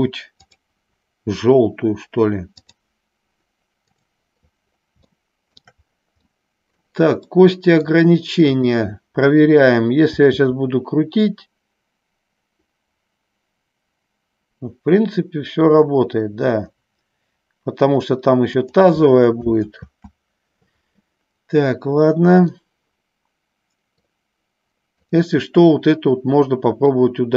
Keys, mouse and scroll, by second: 0.6-3.0 drag, 5.4 shift+middle click, 6.5 middle click, 7.6 middle click, 8.7 click, 10.5 r, 20.1 ctrl+z, 22.8-24.2 middle drag, 25.1 click, 27.1 middle click.